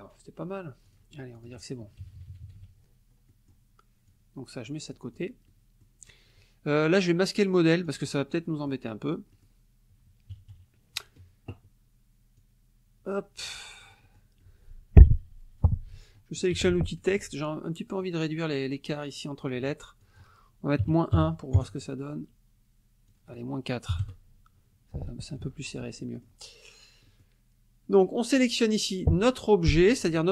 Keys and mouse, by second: 0.9 click, 1.4 click, 2.0 KP_Subtract, 3.3 middle click, 4.1-5.4 drag, 5.5 middle click, 7.9 click, 8.4 middle click, 9.3 middle click, 10.3 KP_Subtract, 12.4-14.0 drag, 14.4-15.8 middle drag, 16.2 middle click, 16.5 t, 16.9 ctrl+click, 17.2 ctrl+a, 20.0 click, 20.8 KP_Subtract, 21.1 KP_1, 21.6 KP_Enter, 23.1 click, 23.9 KP_4, 24.0 KP_Enter, 25.4 F1, 25.7 click, 26.0 middle click, 27.1 middle click, 28.3 click.